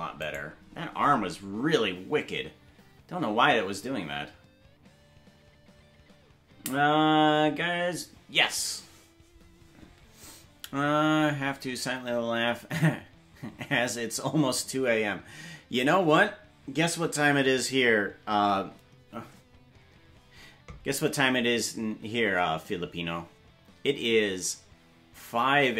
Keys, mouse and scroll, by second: 0.3 right click.